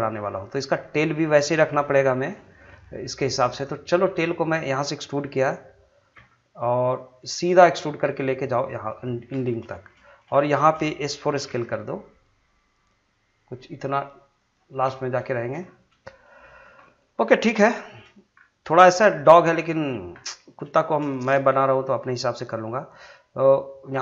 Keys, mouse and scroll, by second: 0.1 scroll down 1, 0.3 middle click, 2.8-3.4 scroll up 1, 3.6 shift+middle click, 6.1 e, 9.2 scroll down 1, 9.7 shift+middle click, 10.1 scroll up 1, 10.3 shift+middle click, 11.4 s, 14.4 click, 14.7-15.1 scroll down 1, 15.2 shift+middle click, 15.6 scroll up 1, 16.0 shift+middle click, 17.8 shift+scroll down 1, 18.1 shift+scroll up 1, 18.3 scroll down 1, 18.8 shift+middle click, 20.7 shift+middle click.